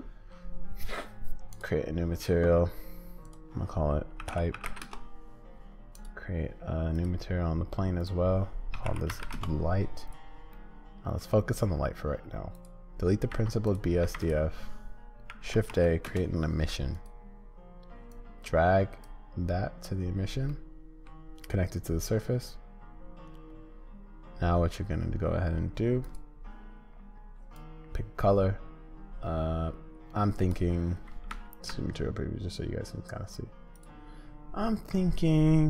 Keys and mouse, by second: 6.0 click, 8.0-9.8 drag, 10.6 middle click, 13.3 x, 14.0 shift+a, 18.1-20.5 drag, 20.5 middle click, 31.3 z, 33.7 click.